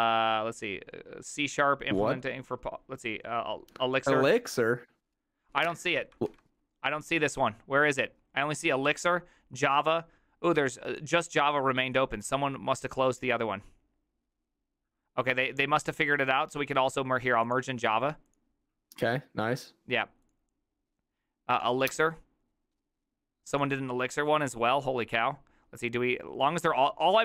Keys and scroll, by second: 6.4 ctrl+r.